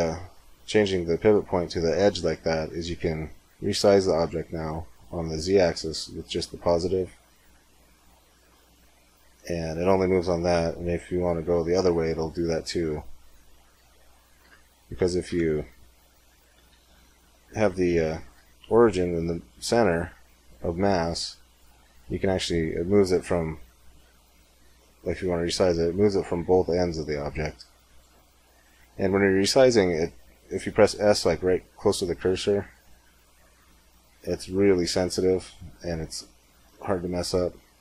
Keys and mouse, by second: 0.6 middle click, 3.7 s, 14.3 Tab, 15.1 Tab, 16.7 shift+s, 18.1 space, 21.8 s, 23.2 z, 24.3 z, 24.9 s, 30.4 s.